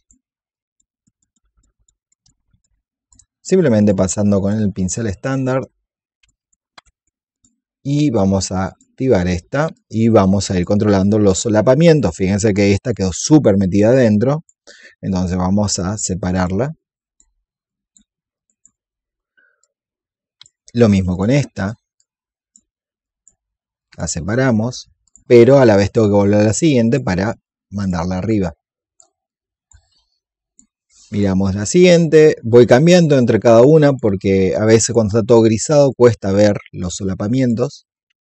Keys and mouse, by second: 2.5-10.6 drag, 10.8 alt+click, 11.4 click, 12.8 alt+click, 13.6-20.5 drag, 21.0 alt+click, 21.9 click, 24.9 alt+click, 29.2 alt+click, 30.0 click, 31.0 alt+click, 32.5 alt+click, 33.4 alt+click, 34.4 alt+click, 35.8-38.2 drag.